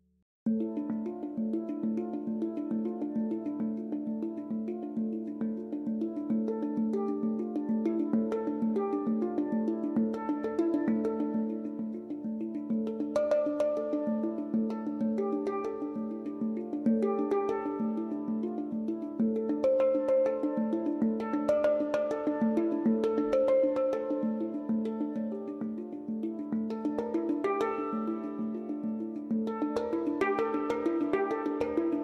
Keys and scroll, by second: 24.3-25.3 typing.